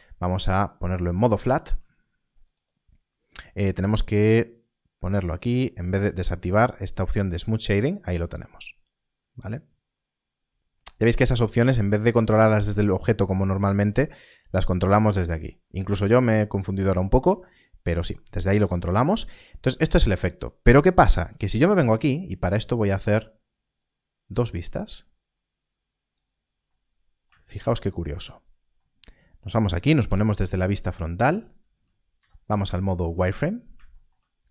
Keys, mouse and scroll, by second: 0.0 Tab, 0.9 click, 2.4 right click, 7.2 right click, 19.8 click, 23.7 Tab, 23.8 click, 29.9 KP_1, 31.1 scroll up 1, 32.1 z, 33.3 scroll up 1.